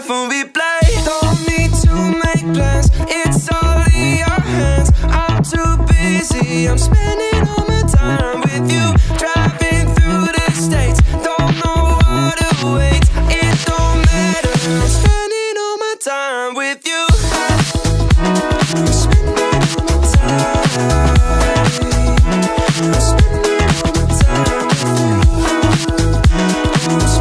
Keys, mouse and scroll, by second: 1.4 click, 8.4-9.8 drag, 10.6-11.9 drag, 12.6 click, 15.0-15.8 middle drag, 17.9-18.9 drag, 19.7 click, 20.3 space, 21.4-23.4 middle drag.